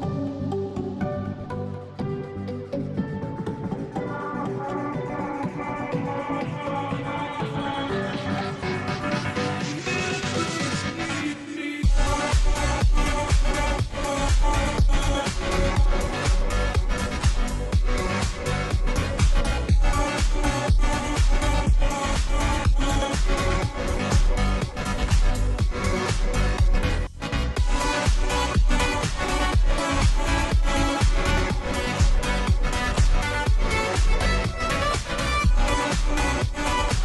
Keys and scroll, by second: 26.8 6, 27.8 6.